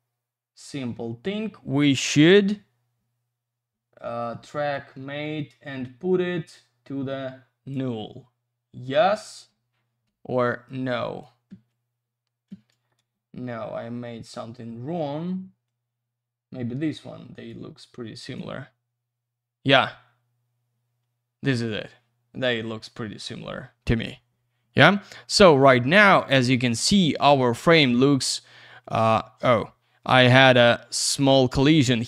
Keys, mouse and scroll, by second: 4.7 click, 10.0 space, 10.6 click, 11.4 space, 13.0 ctrl+alt+z, 15.6 click, 18.3 space.